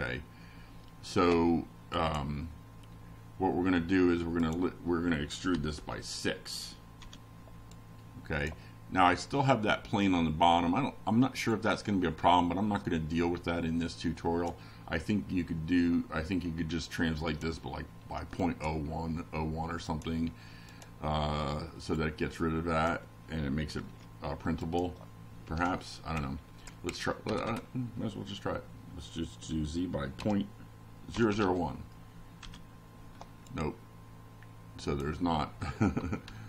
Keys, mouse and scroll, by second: 1.0 BackSpace, 3.7-5.3 typing, 5.8 F5, 6.7-8.3 drag, 9.3 BackSpace, 10.2 1, 12.8 Left, 14.0 -, 14.4 Right, 16.4 0, 17.8 F5, 18.7-19.6 drag, 20.2 click, 20.7 click, 22.0 click, 24.8-26.9 drag, 27.5-28.5 typing, 30.0 F5, 31.1-32.6 drag, 33.0-35.3 drag.